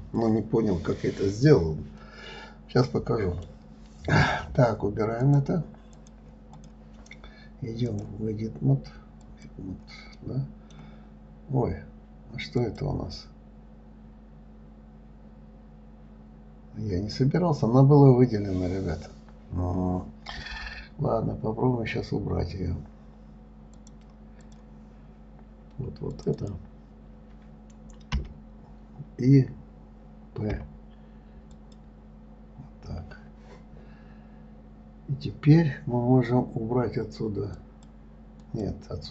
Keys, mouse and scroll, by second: 2.4-5.4 middle drag, 5.6 click, 6.3 click, 6.9 click, 8.2-10.6 drag, 10.6-11.9 middle drag, 11.9 scroll up 1, 13.0 click, 17.8 scroll down 1, 24.1-26.6 drag, 26.7 click, 28.5 l, 37.9 click.